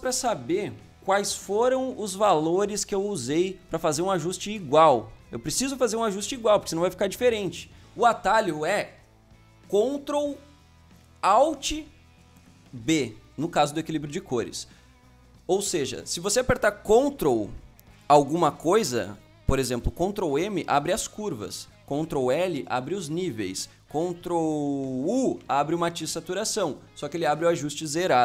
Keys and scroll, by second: 20.2 ctrl+m, 21.8 Escape, 22.3 ctrl+l, 23.6 Escape, 24.2 ctrl+Escape, 25.2 ctrl+u.